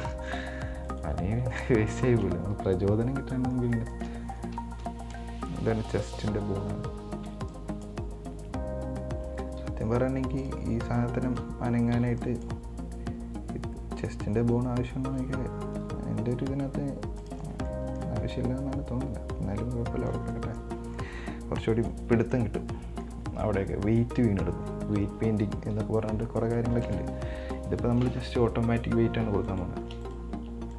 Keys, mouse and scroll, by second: 0.0 middle click, 0.5 right click, 1.1 right click, 2.1 shift+right click, 3.3 scroll up 3, 3.5 middle click, 4.2 shift+right click, 4.8 KP_1, 5.0 KP_1, 6.1 right click, 7.5 b, 9.8 g, 11.2 right click, 12.2 b, 16.0 g, 17.8 scroll down 5, 17.9-21.0 middle drag, 21.0 scroll down 1, 21.2-23.5 middle drag, 23.5 scroll up 3, 23.7-25.9 middle drag, 25.9 KP_1, 27.1 Tab, 29.7 right click, 30.3 shift+right click.